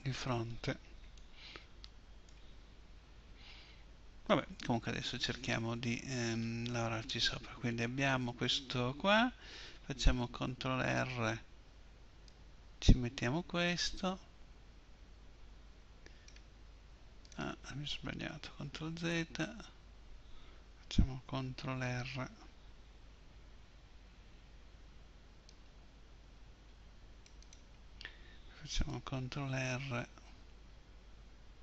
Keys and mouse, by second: 10.3 ctrl+r, 17.3-19.3 drag, 18.6 ctrl+z, 22.7 ctrl+r, 29.4 ctrl+r.